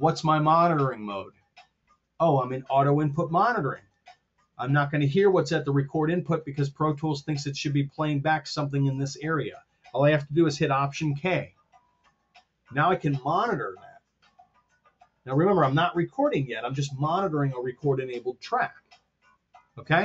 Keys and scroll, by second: 11.4 alt+k.